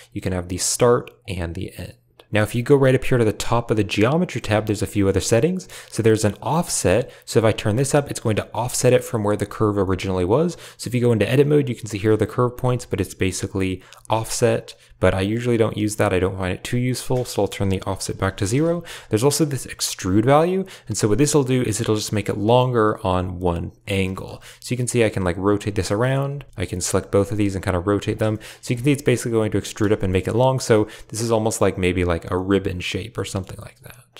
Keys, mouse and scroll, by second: 1.1 click, 4.6 click, 4.8 click, 5.9-7.7 drag, 8.2 Tab, 8.8 shift+click, 9.0 a, 9.1 a, 9.7 shift+click, 11.1 click, 11.3 g, 12.2 a, 12.6 Tab, 16.6 shift+click, 17.2 click, 19.4-21.3 shift+drag, 21.6 middle click, 22.0 shift+click, 22.3 click, 22.8 Tab, 23.8 right click, 24.0 click, 24.2 r, 25.8 click, 26.2 r, 26.5 shift+click, 26.8 r, 28.2 shift+click, 28.5 Tab, 30.1 click, 32.2-33.0 drag, 33.1 shift+click, 33.2 shift+middle drag.